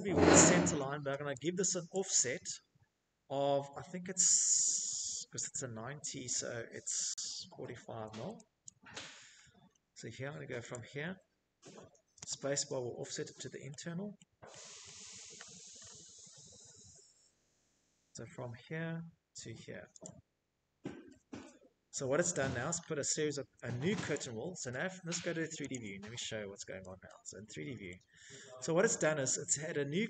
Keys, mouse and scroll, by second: 5.1-6.1 typing, 11.6 scroll, 12.1 click, 12.4-14.0 scroll, 16.1 scroll, 17.6 click, 18.3-19.1 scroll, 19.5 Escape, 19.8 Escape, 20.0 Escape, 20.2 scroll, 20.3 Escape, 20.9 Escape, 21.6 click, 21.9 middle click, 21.9 right click, 21.9 click, 22.0 Escape, 22.1 middle click, 22.2 scroll, 23.2 click, 24.0-25.9 scroll, 25.9 shift+middle click, 26.0-27.2 scroll, 28.1 scroll, 28.1 shift+middle click, 29.6 click.